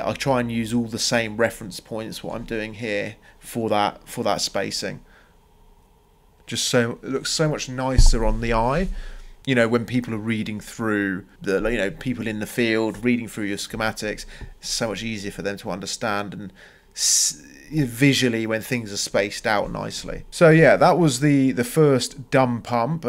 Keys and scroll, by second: 3.9 Escape.